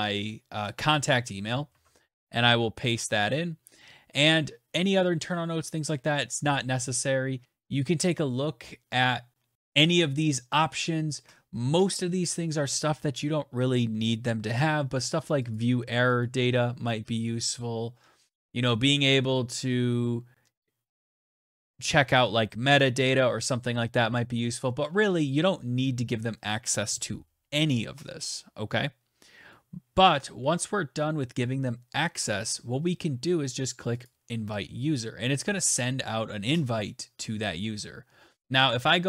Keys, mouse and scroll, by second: 0.5 click, 1.3 ctrl+c, 1.8 click, 1.9 ctrl+v, 14.6 click, 15.1 click, 15.8 click, 33.6 click.